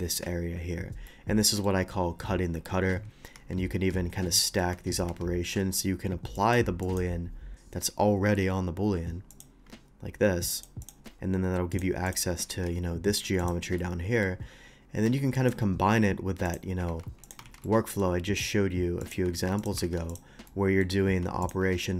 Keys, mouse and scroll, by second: 1.1 middle click, 3.4 Tab, 3.7 Tab, 4.4 middle click, 6.3 Tab, 6.3 click, 6.8 click, 9.3 click, 10.5 click, 10.8 click, 11.7 click, 12.1 click, 12.5 Tab, 13.4 click, 13.8-14.2 middle drag, 15.3 ctrl+click, 16.4 ctrl+click, 16.9 ctrl+x, 17.2 click, 17.5 ctrl+x, 17.6 middle click, 18.2 scroll up 1, 19.0 click, 19.3 ctrl+x, 19.6 click, 19.8 ctrl+x, 20.1 click, 20.5 middle click, 21.4 ctrl+click, 21.7 ctrl+middle click.